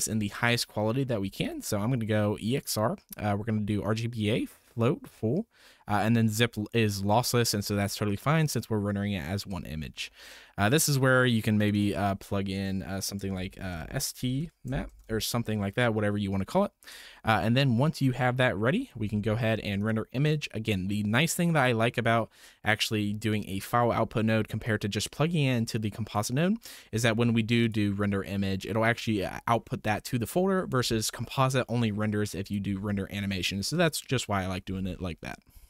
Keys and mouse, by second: 1.4-2.7 drag, 3.8-8.5 drag, 11.6-16.9 drag, 19.8-20.5 drag, 24.6-26.2 drag, 27.6-28.8 drag, 32.5-35.0 drag.